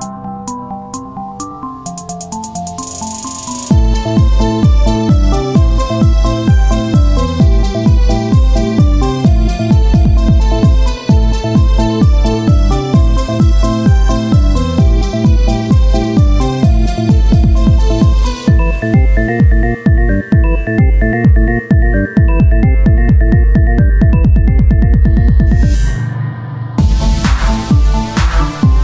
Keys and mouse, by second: 1.4 middle click, 2.5 Tab, 4.3-6.0 drag, 6.0 Tab, 9.0 KP_1, 9.6 z, 10.9 z, 11.6 z, 13.6 Tab, 14.9 ctrl+Tab, 17.3 KP_1, 17.6 z, 18.2 z, 19.6 KP_1, 19.9 z, 22.0 click, 22.6 s, 23.7 r, 24.9 click, 26.1 Tab, 26.5 z, 26.5-28.5 drag, 28.5 KP_1.